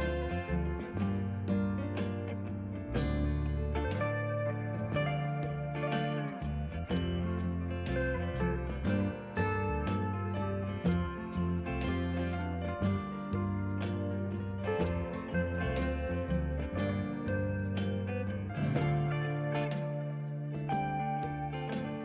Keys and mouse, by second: 0.2 click, 1.4 click, 3.0 KP_2, 3.1 Return, 3.5 Return, 3.8 click, 4.9 ctrl+shift+x, 5.2 click, 7.4 Escape, 7.8 click, 8.1 click, 9.8 ctrl+r, 10.5 shift+click, 11.6 KP_2, 11.7 Return, 13.3 click, 13.6 click, 14.6 click, 18.9 click, 19.3 Escape, 20.3 shift+click, 20.5 click.